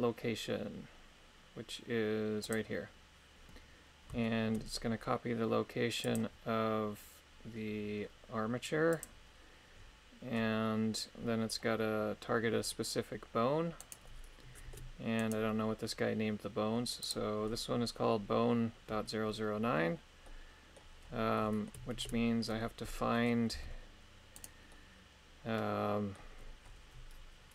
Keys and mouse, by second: 4.2 shift+middle click, 6.0 click, 13.8 right click, 14.6 ctrl+Tab, 15.1 right click, 20.2 middle click, 21.3 middle click, 21.9 ctrl+Tab, 22.8 middle click, 23.5 g, 24.4 right click, 24.7-26.1 middle drag.